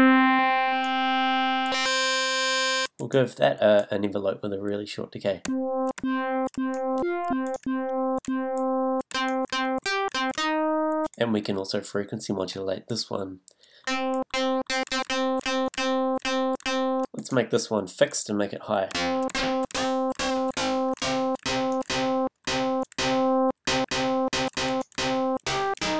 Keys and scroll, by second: 5.4 a, 13.8 a, 18.9 a.